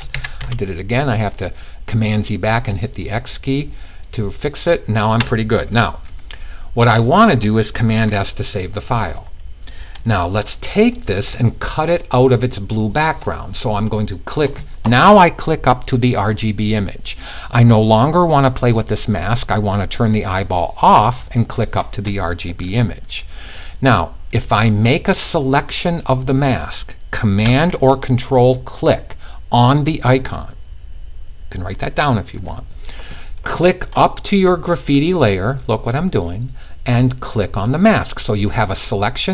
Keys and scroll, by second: 7.5 super+s.